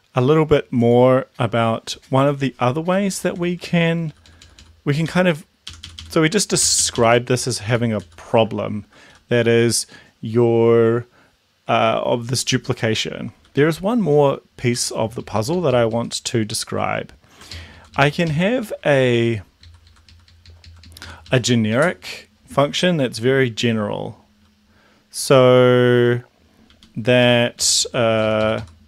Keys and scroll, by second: 3.5 Down, 3.8 Down, 3.9 Down, 4.1 Down, 4.3 Down, 4.5 Down, 5.1 Down, 5.7 Up, 5.8 Up, 6.1 Up, 6.7 shift+Up, 7.1 shift+Left, 7.4 shift+Up, 8.0 shift+Down, 9.2 shift+Home, 13.4 Up, 13.6 Up, 14.7 End, 15.1 Left, 15.2 Left, 15.3 Left, 16.4 Right, 17.5 ctrl+shift+Left, 18.6 ctrl+shift+Right, 19.7 shift+Left, 24.3 Down, 26.7 Up, 27.3 Down, 27.6 End, 27.8 Left.